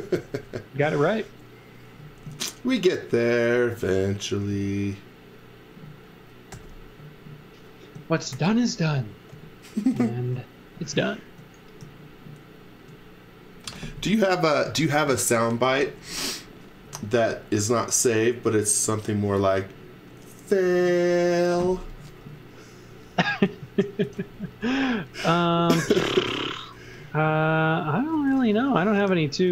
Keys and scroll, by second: 0.7 l, 4.5 space, 6.5 g, 8.3 shift+3, 9.3 l, 13.6 space, 23.2 z, 24.0 x, 24.4 v, 25.6 x, 25.9 z, 26.7 b, 27.7 b, 28.1 space, 29.1 space.